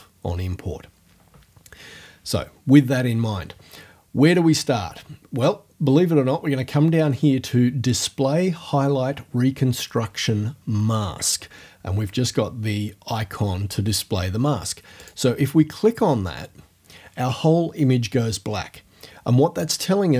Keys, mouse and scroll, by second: 15.0 click.